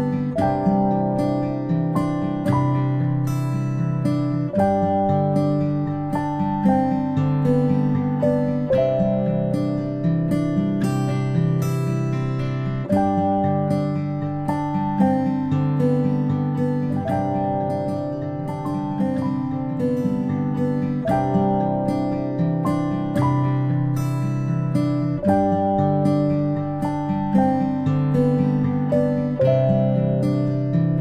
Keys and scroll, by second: 8.1 a, 24.7 ctrl+space, 25.0 ctrl+space, 29.0 space, 29.2-30.6 space.